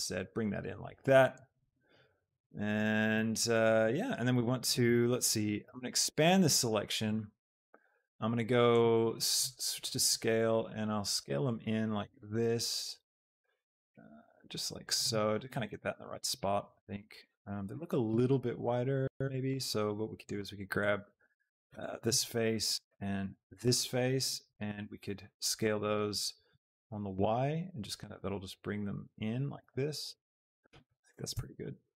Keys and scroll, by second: 5.6 ctrl+KP_Add, 31.3 Tab.